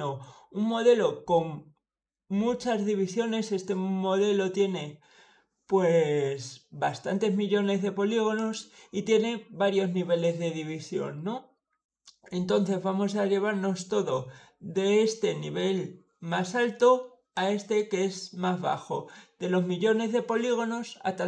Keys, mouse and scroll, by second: 8.2 click, 16.6 click.